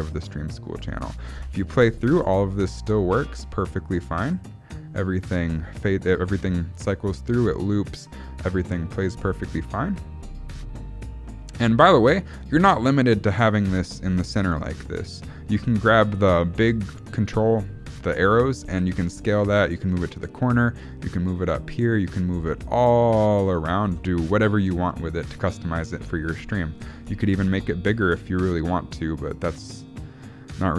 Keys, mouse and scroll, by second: 1.4 space, 13.8 space, 15.1 click, 18.8 s, 19.6 g, 23.9 ctrl+z, 26.9 scroll up 1, 27.4 s.